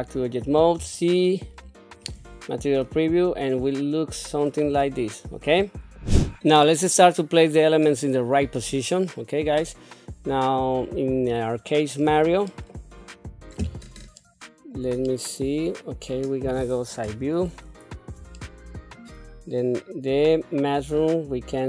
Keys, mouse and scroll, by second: 0.7 z, 2.8-4.4 middle drag, 4.8 shift+middle click, 6.6-8.0 middle drag, 8.7-11.6 middle drag, 12.0 scroll up 3, 12.5 middle click, 14.1 shift+middle click, 15.0-16.4 middle drag, 17.0 KP_3, 18.3 shift+middle click, 20.6 click.